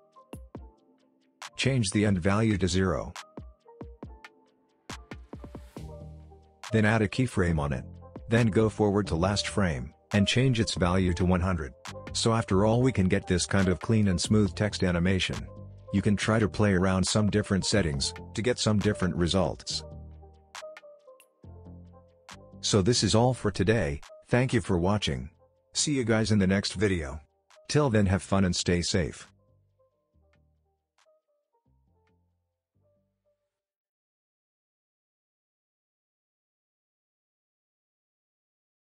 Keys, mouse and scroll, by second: 4.7 ctrl+z, 5.3-7.7 drag, 9.5-10.1 shift+click, 11.2 click, 12.4 space, 14.2 click, 14.5 space, 16.2 click, 16.5 space, 18.3-18.9 click, 18.9 space, 20.9-22.5 drag, 23.0 n, 23.6 click, 23.9 space, 28.8 space, 29.5 click.